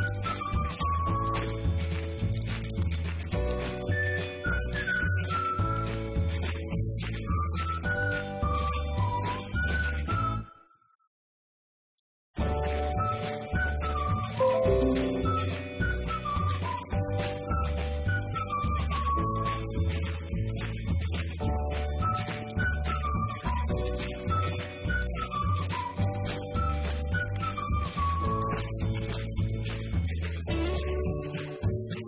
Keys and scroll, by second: 0.0-4.7 typing, 6.1-8.2 typing, 9.3-10.5 typing, 12.0 r, 13.5 space, 19.7 ., 23.4-25.1 typing, 26.4-27.8 typing.